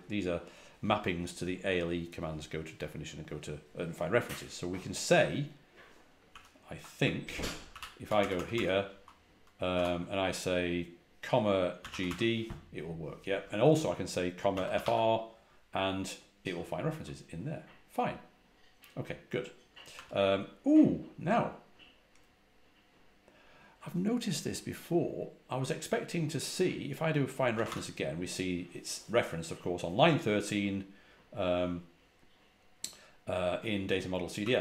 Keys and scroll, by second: 6.2 ctrl+h, 7.1-8.4 typing, 9.6 typing, 11.4-12.4 typing, 14.1-15.2 typing, 19.8 typing, 27.2-28.0 typing, 34.3 typing.